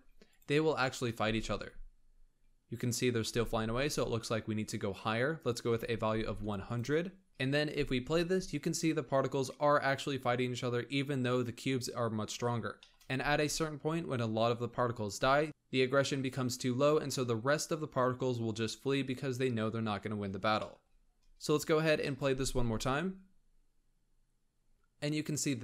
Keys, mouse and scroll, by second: 0.1 click, 0.7-1.0 shift+middle drag, 1.0 space, 1.5-2.4 scroll up 1, 2.4 scroll down 2, 3.2 space, 4.4-6.1 drag, 6.1 0, 7.3 shift+middle click, 7.5 space, 12.1 scroll down 2, 12.7-13.0 shift+middle drag, 13.0 space, 16.8-18.6 scroll down 3, 18.6-19.3 scroll up 2, 19.4-20.4 scroll up 3, 20.4-22.1 shift+middle drag, 22.1 space.